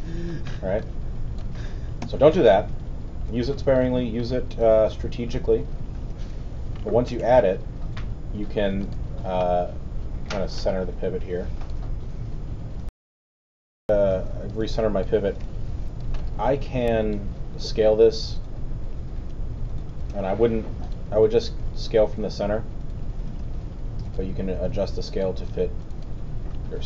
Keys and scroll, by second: 2.0 alt+z, 2.5 z, 6.1 w, 7.0 alt+w, 13.0 super+., 13.7 super+w, 14.3 alt+w, 15.4 alt+r, 20.1 z, 23.4 w.